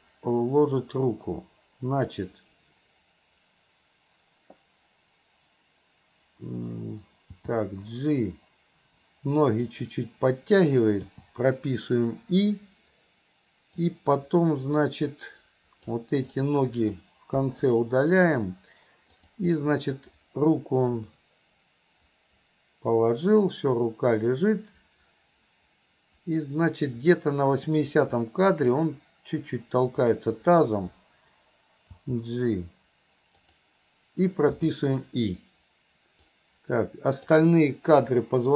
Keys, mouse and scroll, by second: 7.3 g, 13.9-16.1 drag, 16.3-17.0 drag, 17.5 Delete, 19.2 click, 19.6-28.9 drag, 30.0 click, 32.0 g, 34.6 i, 36.3-37.3 drag.